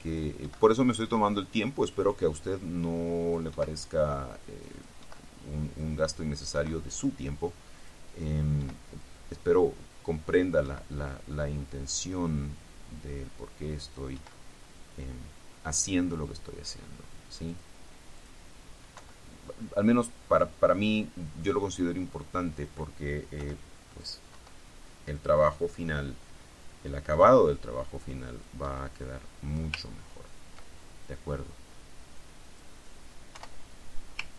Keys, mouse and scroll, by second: 0.2-0.8 drag, 1.0 click, 2.0-3.7 drag, 3.7 Delete, 4.8 click, 5.2 Delete, 6.0 click, 6.7 Delete, 7.9 click, 8.8 Delete, 9.2-10.8 drag, 10.8 Delete, 11.8-14.6 drag, 14.6 Delete, 17.6 click, 18.3 click, 19.1 Delete, 21.2 click, 22.7 click, 23.6 Delete, 24.2 click, 24.5 Delete, 25.0-25.8 drag, 26.8-28.8 drag, 28.8 Delete, 30.0-30.4 ctrl+scroll down 2, 32.6 click, 33.5 Delete.